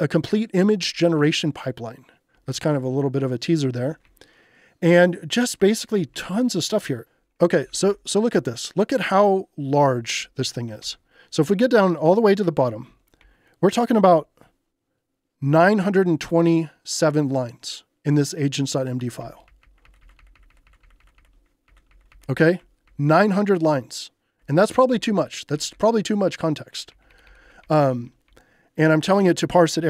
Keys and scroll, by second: 0.6 j, 1.3 j, 2.3 j, 6.2 k, 7.3-8.3 typing, 10.8 shift+g, 12.1 k, 13.2 j, 19.2 k, 23.3 k, 24.9-26.9 typing, 29.3 j.